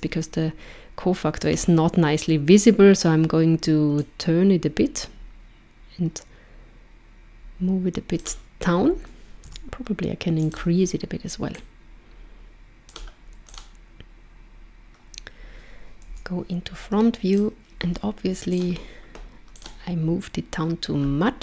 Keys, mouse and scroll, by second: 4.0 click, 9.4 s, 11.6 click, 13.4 click, 16.1 KP_1, 17.3 click, 18.5 click, 19.5 click.